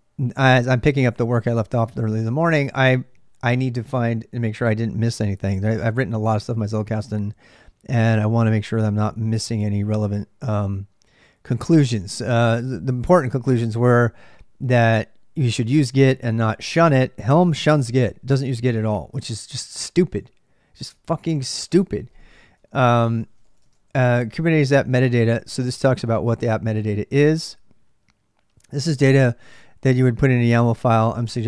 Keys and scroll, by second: 21.2-26.5 typing.